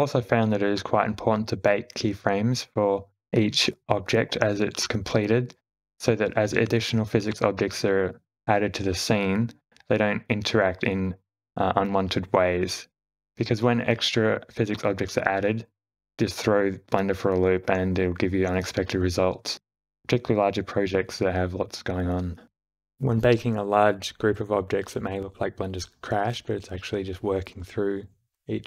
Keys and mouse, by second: 2.4 click, 3.3 q, 10.2-10.7 drag, 11.6 click, 14.7 space, 15.6 space, 16.3 shift+Left, 17.9 click, 18.6 x, 19.4 click, 19.6 space, 22.1 space, 22.4 shift+Left, 22.7 shift+g, 23.3 q.